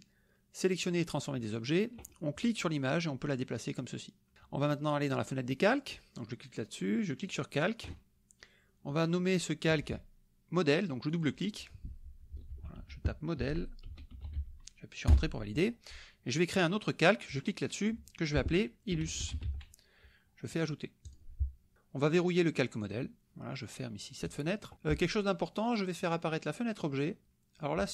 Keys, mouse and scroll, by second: 2.6-4.3 drag, 5.5 click, 7.3 click, 11.1 click, 12.5 ctrl+a, 12.8 ctrl+m, 13.4 o, 14.1 e, 15.1 Return, 17.3 click, 18.7-19.9 typing, 21.1 click, 23.0 click, 24.2 click, 26.0 click.